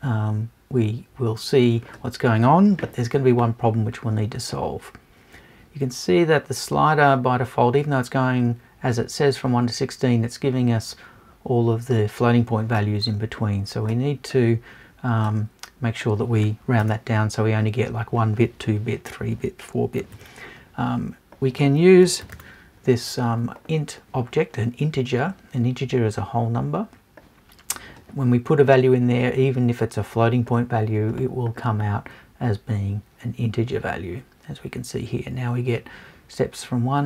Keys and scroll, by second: 16.8 BackSpace.